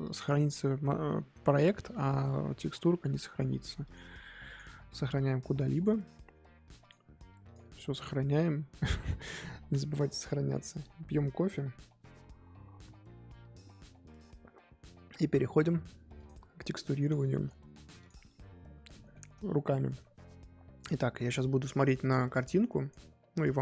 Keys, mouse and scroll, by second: 5.7 click, 18.1 click, 18.9-20.7 middle drag, 20.7 click.